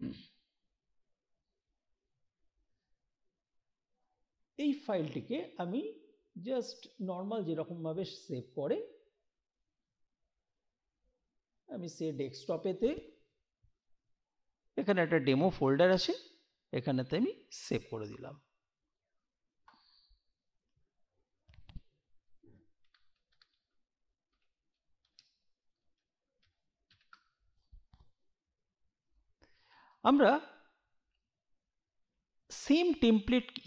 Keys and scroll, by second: 22.4-27.4 typing.